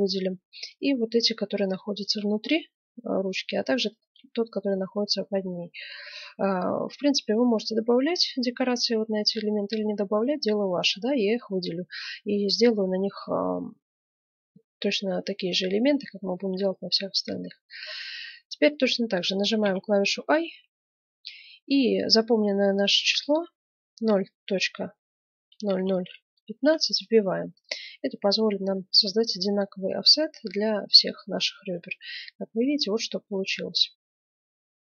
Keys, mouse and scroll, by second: 1.4 right click, 2.4-3.8 middle drag, 3.8 click, 3.8 right click, 4.1-5.1 right drag, 5.1 middle click, 5.5 right click, 5.6-6.8 middle drag, 10.1-10.9 scroll up 1, 12.2-14.0 middle drag, 14.2-18.1 middle drag, 31.9-33.9 middle drag.